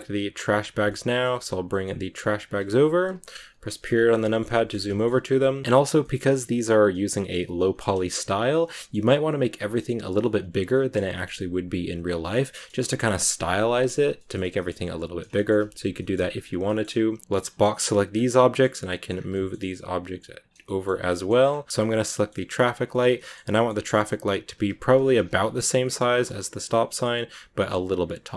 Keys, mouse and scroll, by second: 0.6 scroll down 2, 0.8 shift+middle click, 1.4 g, 3.2 KP_Decimal, 3.9 scroll down 1, 4.1 middle click, 4.4-4.9 shift+scroll up 4, 4.4 shift+middle click, 4.9 middle click, 5.2 s, 5.6 middle click, 6.1 scroll down 1, 6.3-8.0 middle drag, 8.0 scroll down 1, 8.2 shift+middle click, 8.6 g, 10.1 middle click, 11.0 g, 12.6 KP_Decimal, 13.3 scroll down 2, 14.1 shift+middle click, 14.4 g, 15.3 shift+middle click, 15.5-15.8 scroll down 1, 15.8 g, 16.6 shift+middle click, 17.2 b, 18.2 middle click, 19.0 scroll down 2, 19.2 g, 20.5 shift+middle click, 20.9-21.7 scroll up 3, 21.0 middle click, 21.7 g, 22.0 g, 22.8 middle click, 23.4 g, 25.0 KP_Decimal, 25.6 scroll down 1, 25.7 middle click, 26.0 g, 26.6 middle click, 27.2 s.